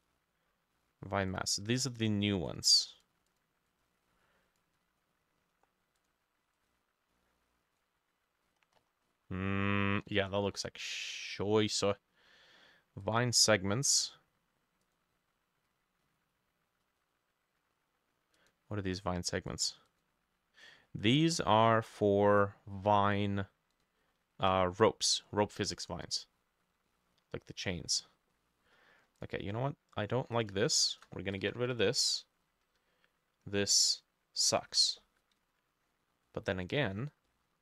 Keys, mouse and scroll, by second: 3.7 double click, 8.5-9.3 scroll up 14, 10.0-11.0 scroll down 16, 11.0 middle click, 19.9 double click, 25.2 middle click, 25.6 middle click, 26.2 middle click, 27.5 middle click, 27.9 middle click, 28.4 middle click, 30.8 shift+click, 31.5 Delete, 34.7 Escape, 35.9-36.3 scroll up 3, 36.3 middle click, 36.6-37.3 scroll up 8, 37.3 middle click.